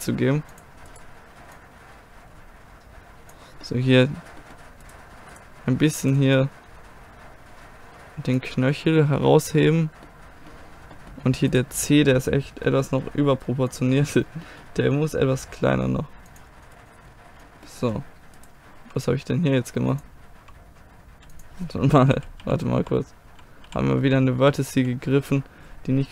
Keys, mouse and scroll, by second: 0.6 middle click, 0.9-3.5 drag, 0.9-2.7 right drag, 3.5-5.6 middle drag, 4.9-8.4 drag, 6.0-7.2 right drag, 8.6-11.6 middle drag, 11.6-13.7 right drag, 13.7-15.6 drag, 15.4 g, 16.5 g, 16.7 click, 16.7 g, 16.9 click, 16.9 g, 17.1 click, 17.3 g, 17.8 middle click, 18.4-20.3 drag, 18.8 g, 20.4 g, 22.2 ctrl+z, 22.5 ctrl+z, 22.9 ctrl+z, 23.4 ctrl+z, 24.0 ctrl+z, 24.1 ctrl+z, 24.8 ctrl+z, 25.2 ctrl+z.